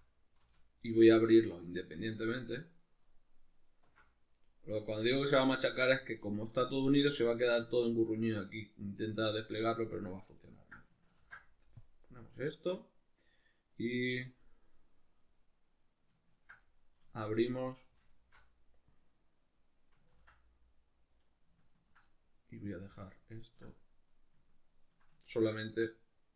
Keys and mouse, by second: 0.0 middle click, 0.9 alt+shift+right click, 1.5 alt+shift+right click, 2.2 alt+shift+right click, 2.8 alt+shift+right click, 3.7 alt+shift+right click, 4.4-14.1 middle drag, 11.2 ctrl+e, 14.1 right click, 14.5-16.3 middle drag, 16.3 ctrl+right click, 16.7-18.1 middle drag, 18.1 alt+shift+right click, 18.5-20.1 middle drag, 20.1 ctrl+z, 20.5-21.7 middle drag, 21.7 ctrl+right click, 22.1-23.1 middle drag, 23.1 ctrl+right click, 23.3 ctrl+right click, 23.7-24.7 middle drag, 24.7 ctrl+right click, 25.3 ctrl+right click, 25.6-26.3 middle drag.